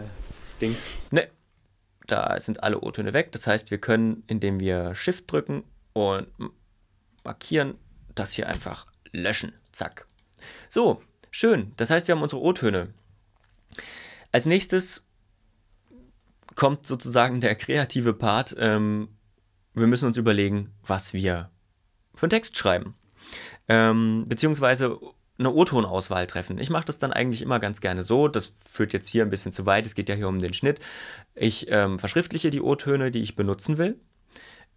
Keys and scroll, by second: 1.0 space, 8.5 BackSpace, 9.5 ↻.